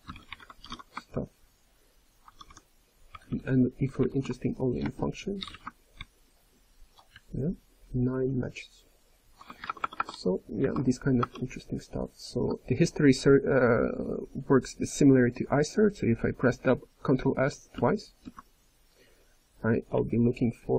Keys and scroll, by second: 2.0-2.8 typing, 3.1 ctrl+n, 3.3 ctrl+n, 3.5 ctrl+n, 3.8 ctrl+p, 3.9-6.5 ctrl+p, 7.1-7.8 ctrl+n, 8.1 ctrl+n, 8.3 ctrl+n, 8.5-9.2 ctrl+p, 9.6 alt+BackSpace, 9.7 alt+BackSpace, 11.1 BackSpace, 18.0 ctrl+s, 19.9 ctrl+n, 20.1 ctrl+n.